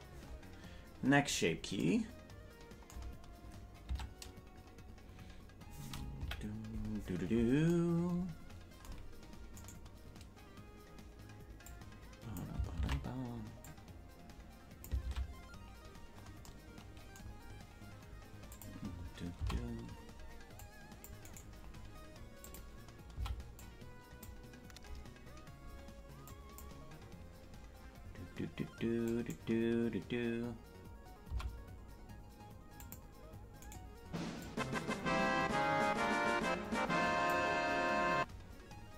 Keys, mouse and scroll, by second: 0.7 scroll down 1, 3.9 Tab, 6.2 KP_Decimal, 9.5-11.2 right drag, 11.6 click, 12.8 ctrl+z, 13.6-14.8 drag, 15.0 ctrl+z, 15.9-16.4 scroll up 7, 18.5 click, 19.3 c, 22.4 click, 23.1 c, 29.1-30.4 scroll down 1, 30.4 scroll down 1, 30.4 scroll up 1, 30.5 scroll down 1, 30.6-31.2 scroll up 2, 31.2 c, 34.4-37.3 drag.